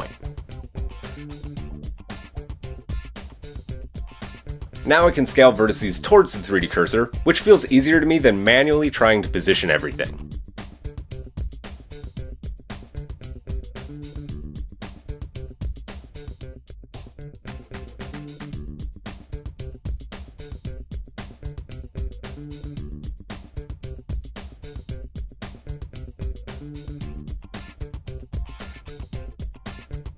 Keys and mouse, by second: 0.2-8.9 drag, 0.2 typing, 2.9 Tab, 4.2 middle click, 4.2 right click, 4.3 KP_1, 6.0 shift+middle click, 6.0 shift+right click, 7.1 s, 8.9-12.0 middle drag, 9.1 s, 12.0 click, 12.3 middle click, 13.4 s, 14.4 click, 14.5 Tab, 16.6-20.9 middle drag, 18.4 KP_1, 20.9-21.8 drag, 21.8-24.8 shift+middle drag, 24.8 click, 24.9 middle click, 25.1 Tab, 25.6 click, 26.0 middle click, 26.4 click, 27.1-30.1 middle drag, 27.1 KP_3, 29.5 g.